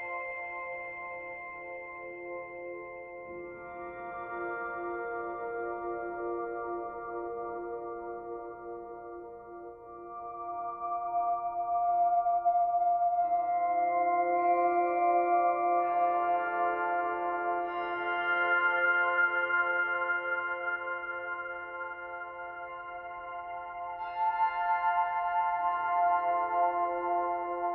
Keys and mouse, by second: 0.7-2.4 drag, 2.4 ctrl+v, 3.5 Return, 6.1 click, 8.2-8.7 drag, 9.2-10.4 drag, 11.1-12.7 ctrl+alt+drag, 13.0-15.4 drag, 15.5-16.4 drag, 16.9-22.4 drag, 24.5-27.6 drag.